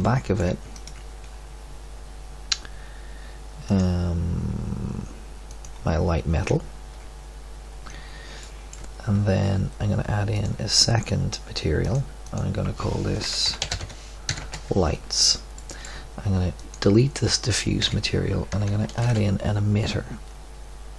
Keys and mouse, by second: 0.2-1.3 middle drag, 8.4 middle click, 14.3-15.5 middle drag, 16.5-17.7 right drag, 17.7 Delete, 18.8-20.9 middle drag, 19.0 shift+a.